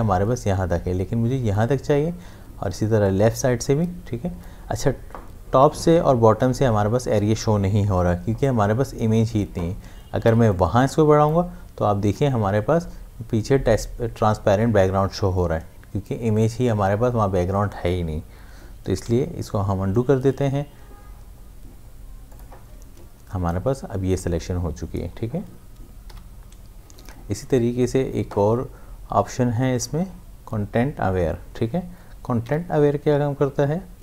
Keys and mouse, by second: 3.1-6.8 drag, 10.5-13.6 drag, 18.4 click, 19.1 ctrl+z, 22.3 click, 26.1 click, 28.2 c, 32.4 v.